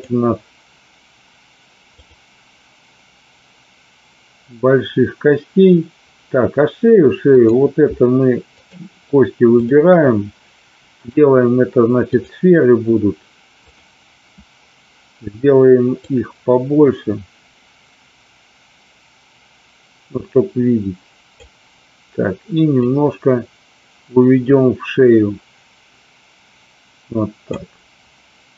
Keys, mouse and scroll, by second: 7.3 click, 8.5 shift+click, 9.6 shift+click, 11.0-12.3 drag, 13.8 click, 15.9-21.3 drag, 22.7-27.5 drag.